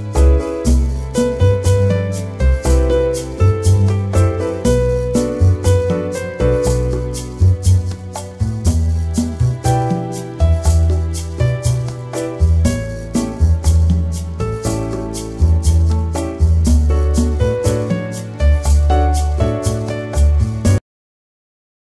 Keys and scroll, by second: 9.9 ctrl+shift+[.